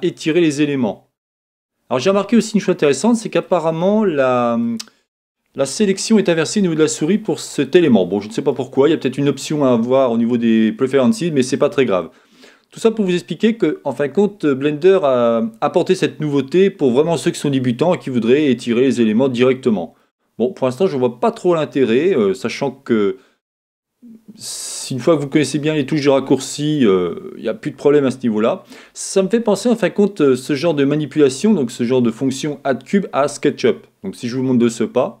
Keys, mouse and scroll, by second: 0.3-2.9 drag, 3.4-35.2 middle drag, 3.5-35.2 right drag.